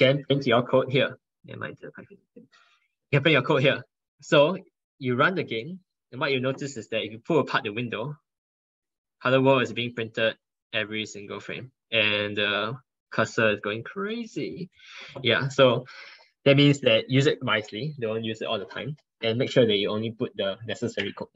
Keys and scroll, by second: 13.7 ctrl+1, 13.8 ctrl+1, 14.4 ctrl+1.